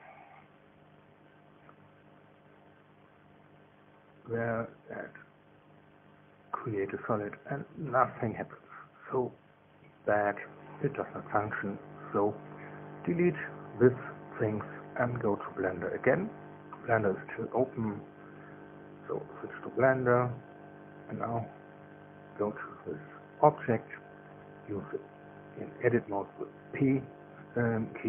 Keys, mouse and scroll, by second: 0.7 click, 4.0 click, 6.2 click, 7.4-7.7 scroll down 2, 15.4 click, 16.3 shift+click, 17.7 Delete, 22.1 click, 23.3 Tab, 24.5 middle click.